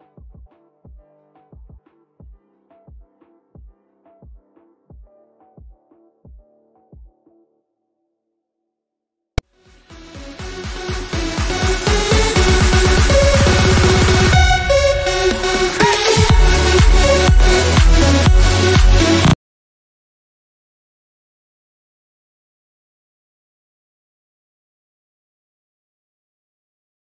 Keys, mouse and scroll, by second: 7.4-9.3 middle drag.